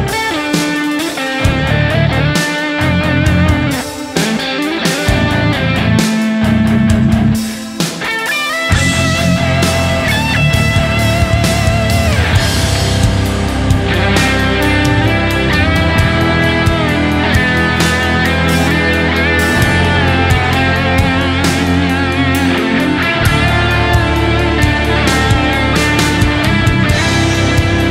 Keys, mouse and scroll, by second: 7.8 alt+right click, 8.0 alt+right click, 8.3 scroll down 1, 8.4 shift+Right.